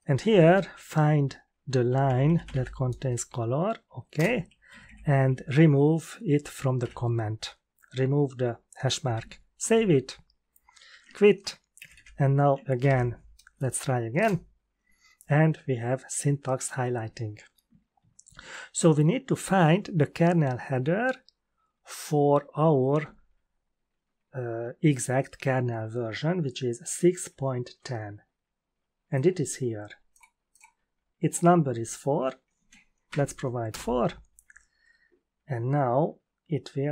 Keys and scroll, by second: 0.7 ctrl+f, 1.6-3.0 typing, 4.1 Return, 4.7 Left, 4.8 Left, 6.8 Delete, 9.3-10.1 typing, 10.8 ctrl+q, 11.7 Up, 11.9 Up, 12.7 ctrl+l, 14.1 Return, 33.0 4, 33.7 Return.